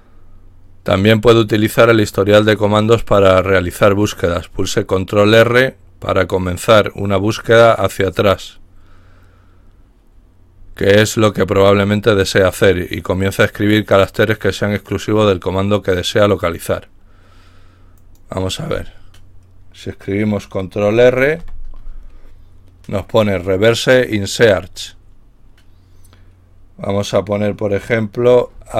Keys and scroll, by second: 21.4 ctrl+r, 28.6-28.7 typing.